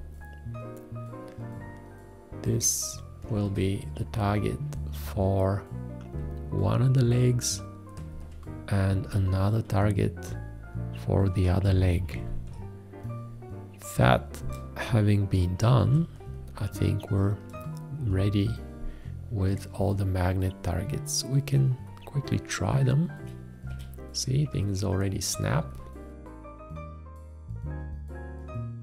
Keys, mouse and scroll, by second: 3.4 alt+`, 9.1 `, 11.8 ctrl+a, 14.9 space, 26.3 click, 27.7 click.